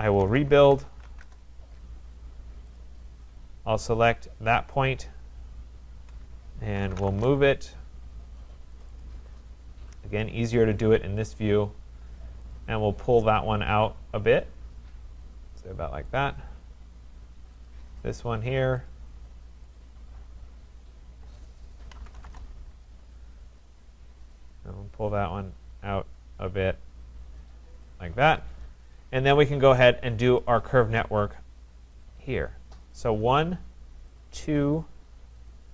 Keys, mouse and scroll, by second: 0.0-1.5 typing, 2.8 click, 4.1 click, 6.5-7.5 typing, 8.8 click, 9.0 click, 9.2 Return, 10.4-11.9 scroll, 12.5 click, 16.1 click, 19.0 click, 19.7 click, 20.3-21.3 scroll, 21.7-22.7 typing, 23.4 click, 24.8 Return, 27.9 click, 29.0 click, 30.4 click, 30.6 click, 32.1 click, 33.0 click, 34.2 shift+click, 34.5 shift+click, 35.5 click.